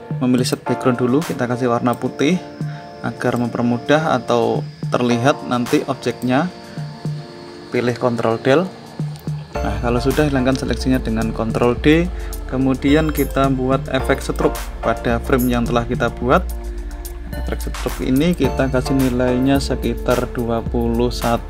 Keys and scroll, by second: 8.1 ctrl+Delete, 11.3 ctrl+d.